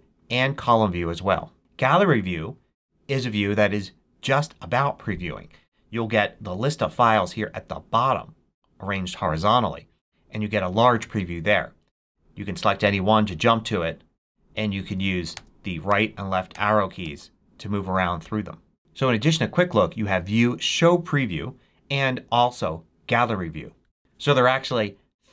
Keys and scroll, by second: 15.2 Right, 15.9 Right, 16.6 Right, 16.9 Left.